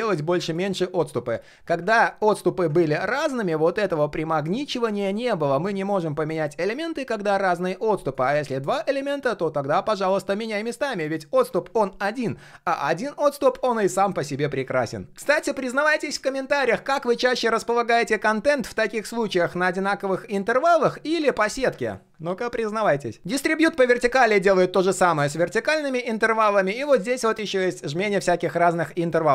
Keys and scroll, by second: 1.9 ctrl+z, 2.2 ctrl+z, 2.7 ctrl+z.